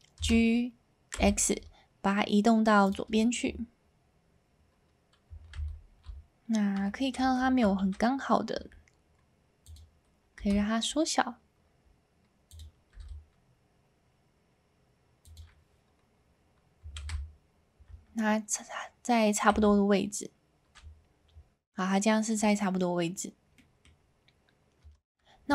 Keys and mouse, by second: 0.2 g, 1.2 x, 2.8 click, 3.3 shift+middle click, 5.5 alt+a, 7.2 ctrl+z, 8.5 s, 9.6 click, 10.4 g, 12.5 click, 12.9 s, 15.2 click, 17.0 alt+a, 19.5 a, 21.8 middle click, 23.5 middle click, 24.8 Tab.